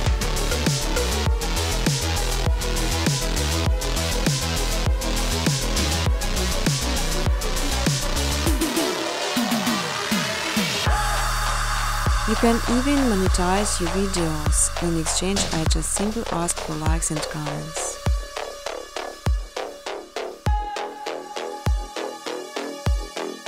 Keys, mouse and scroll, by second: 0.0 click, 0.2-1.3 typing, 0.8 scroll, 1.1 click, 1.8 ctrl+c, 2.1 ctrl+d, 2.7 click, 2.8-3.8 typing, 3.6 click, 4.2 click, 5.3 click, 5.7-6.6 typing, 7.1 Return, 8.4-9.3 typing, 10.5 click, 11.3 click, 12.2 typing, 12.5 middle click, 12.5 middle click, 12.5 middle click, 14.0 click, 14.7 click, 17.2 click, 18.0 right click, 18.7 click, 19.4 click, 20.7 space, 21.6 space, 22.7 click, 23.0 click, 23.2 right click.